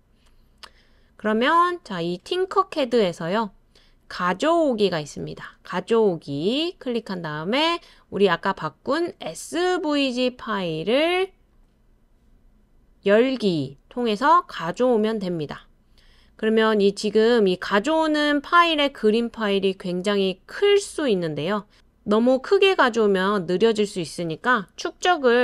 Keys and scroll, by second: 25.0-25.4 typing.